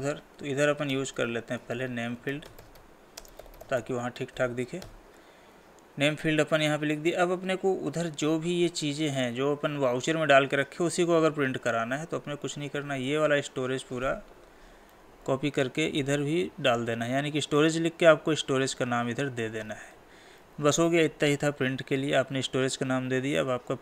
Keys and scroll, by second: 3.2 space, 15.0 ctrl+c, 16.7 ctrl+v, 20.4 ctrl+s.